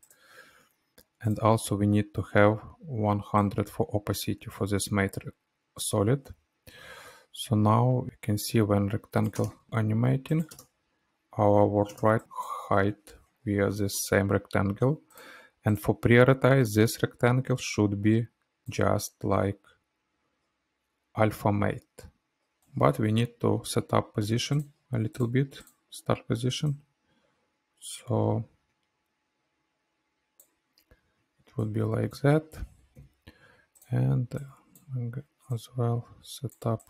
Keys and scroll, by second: 4.8 t, 11.4 space, 23.1 p, 33.0 F9.